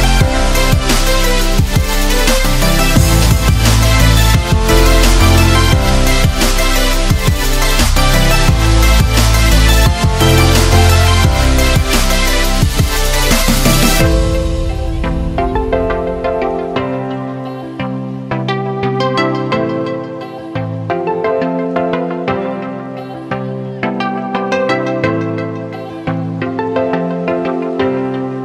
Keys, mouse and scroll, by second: 2.7 Left, 3.2 Down, 3.7 Up, 4.7 click, 5.4 ctrl+scroll down 2, 6.1-6.9 ctrl+alt+scroll down 2, 7.4-8.1 ctrl+alt+scroll up 2, 8.1 click, 10.7 space, 10.9 click, 11.2-11.8 space.